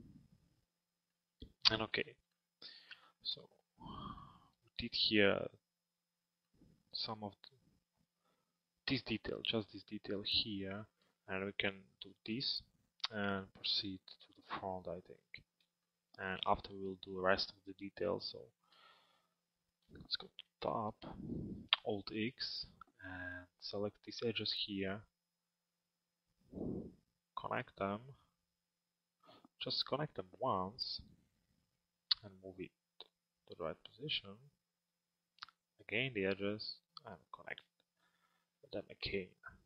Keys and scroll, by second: 18.5 f, 21.2 t, 22.0 alt+x.